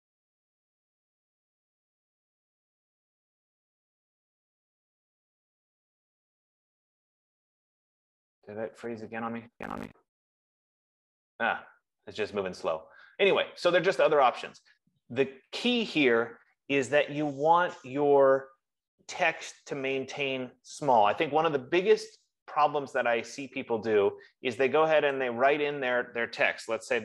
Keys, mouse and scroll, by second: 8.2-8.9 typing, 13.3 click, 23.9 click, 25.5 click, 26.8 F15.